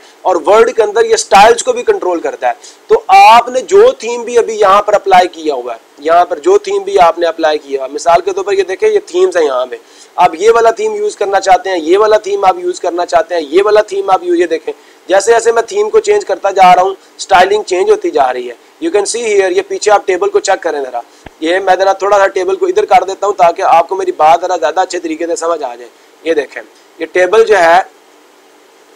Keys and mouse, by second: 6.0-7.1 drag, 23.0 click, 25.0 click, 25.2 click, 25.4 click, 27.2 click, 27.4 click, 27.7 click, 28.5 click, 28.6 click.